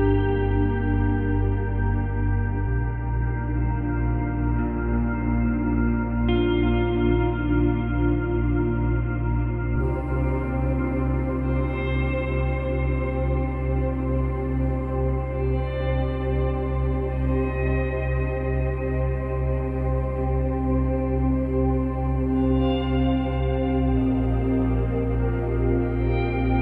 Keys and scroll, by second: 6.5 space, 7.2 space, 8.2 space, 9.6 space, 10.3 space, 11.3 space, 17.0 space.